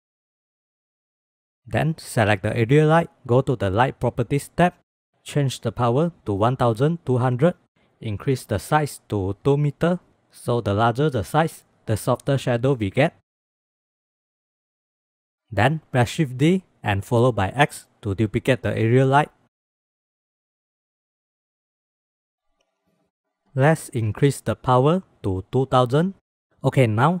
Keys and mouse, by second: 0.2 KP_0, 1.1 shift+click, 2.7 click, 5.3-7.7 drag, 6.9 KP_0, 9.0-10.1 drag, 13.4 drag, 13.8 shift+click, 14.1 click, 16.0 shift+d, 18.3-18.9 drag, 20.3-22.4 drag, 22.7 KP_0, 23.7-25.8 drag, 24.8 KP_0, 25.9 click, 26.2 ctrl+s.